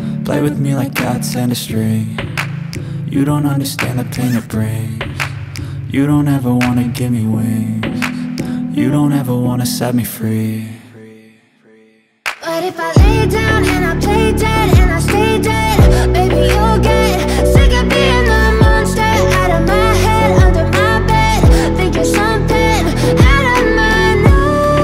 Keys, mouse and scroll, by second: 6.2 alt+scroll up 1, 7.1-8.4 drag, 8.8 alt+scroll down 1, 9.3 space, 9.3 click, 9.7 space, 10.0 alt+scroll down 1, 10.3 space, 10.5 click, 10.7 space, 11.3 click, 13.1 alt+scroll up 1, 15.1 click, 16.0 Left, 20.5 click, 23.6 Left.